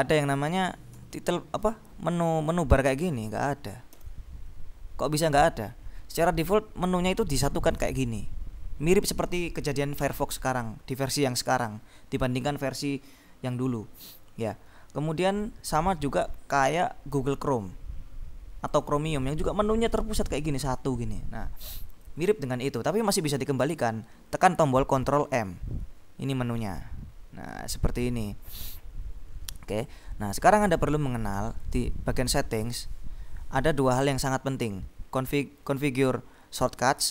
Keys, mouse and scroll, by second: 0.5 click, 1.0 ctrl+m, 4.1 ctrl+m, 7.8 click, 18.8 click, 19.9 click, 22.0 click, 26.7 click, 29.9 click, 31.6 click.